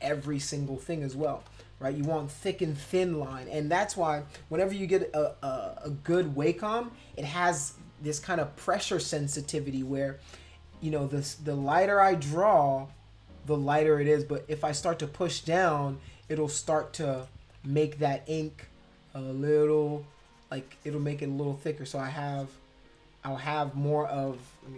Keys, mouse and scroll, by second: 0.1 ctrl+z, 0.2 ctrl+z, 0.4 ctrl+z, 0.6 ctrl+z, 0.8 ctrl+z, 1.3 space, 1.5 click, 2.8 [, 3.2 [, 9.7 space, 9.8 click, 11.4 click, 11.9-15.4 drag, 16.0 click, 17.2 \, 17.5 ], 17.7 ], 18.5-21.5 drag, 22.0 click.